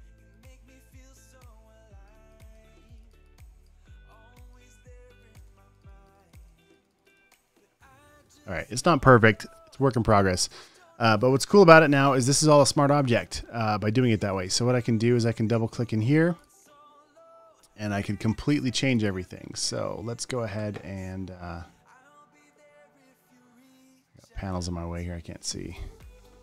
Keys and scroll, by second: 0.2 space, 3.2 space, 3.8 space, 5.5 super+d, 5.6 v, 5.7 space, 6.2 alt+super+space, 7.4-8.6 typing, 18.6 space, 19.1 space.